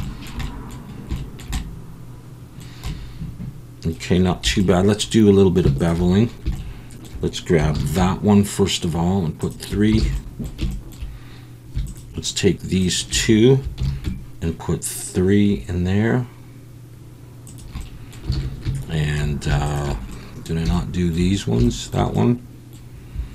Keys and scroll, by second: 4.4 2, 7.7 ctrl+b, 10.0 alt+a, 13.8 ctrl+b, 18.3 alt+a.